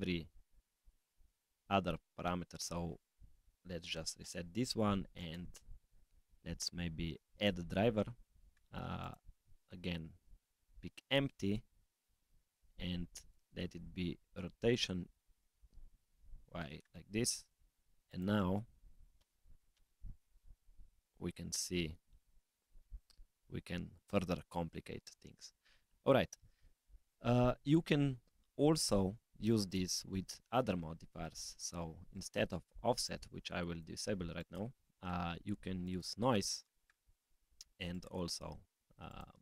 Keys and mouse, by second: 3.0-4.2 drag, 5.1-16.4 drag, 17.6 click, 18.0 click, 19.1 r, 23.0 g, 29.6 middle click, 29.6 click, 32.1 click, 33.0-33.8 drag, 34.3-36.0 drag, 37.9 click, 39.1-39.4 drag.